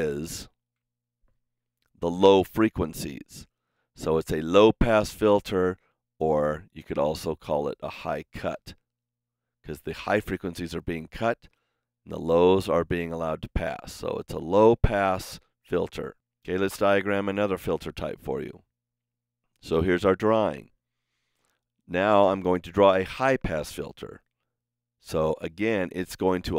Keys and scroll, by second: 0.6 super+z.